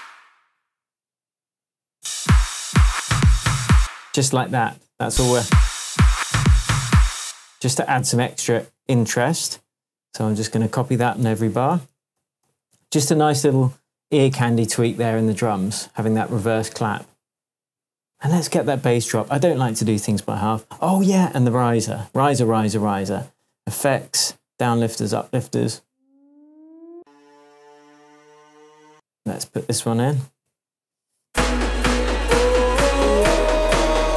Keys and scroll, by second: 1.9 space, 3.7 space, 5.0 space, 7.2 space, 11.2 super+d, 19.7 super+t, 19.9 super+t, 28.9 space, 31.3 space.